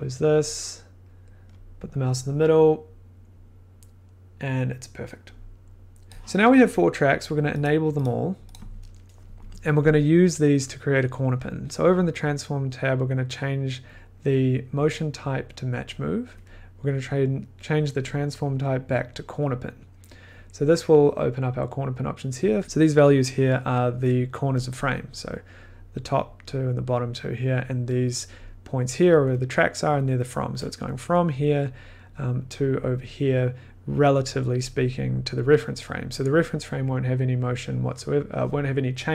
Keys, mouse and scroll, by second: 4.6 click, 6.1 drag, 7.6 click, 8.0 click, 8.5 click, 11.9 click, 13.9 click, 19.5 click, 22.4 click, 22.6 scroll, 24.7 click, 24.7-25.6 scroll, 29.9 click, 32.9 click, 36.0-36.4 scroll, 36.9 scroll.